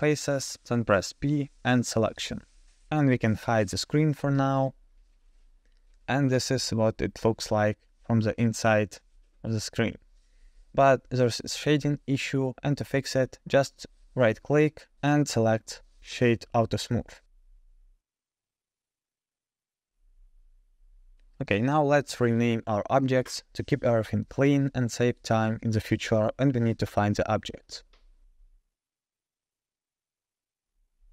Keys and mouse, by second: 0.0 p, 1.9 Tab, 3.4 click, 5.2 click, 6.0-6.9 middle drag, 7.4 KP_0, 12.2-14.0 drag, 14.1 click, 14.8 right click, 20.3 click, 21.0 click, 23.5 click, 24.1 click, 26.5-31.1 drag, 28.9 e.